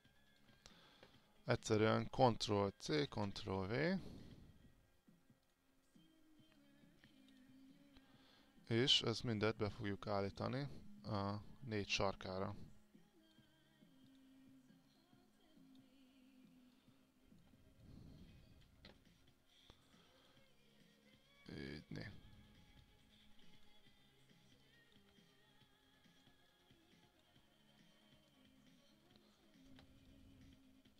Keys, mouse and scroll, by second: 1.5 click, 3.1 ctrl+c, 3.3 ctrl+v, 12.8 alt+click, 14.2 click, 18.0 alt+click, 20.4 click, 24.9 alt+click, 26.7 alt+click, 27.8-30.0 drag, 30.2 alt+click.